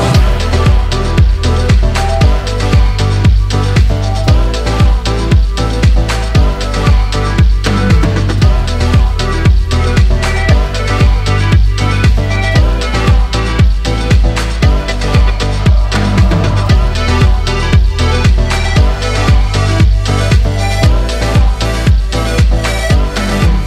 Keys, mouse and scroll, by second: 0.8 click, 1.9 click, 3.3 click, 10.6-13.0 drag, 13.0-18.0 middle drag, 20.4 click, 21.2-23.6 middle drag.